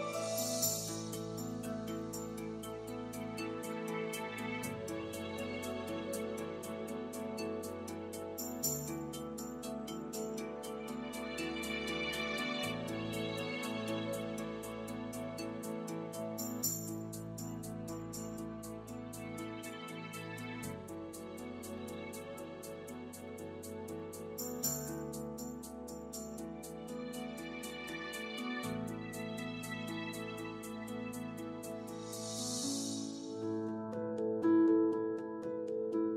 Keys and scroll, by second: 22.0-22.9 typing, 29.3 r.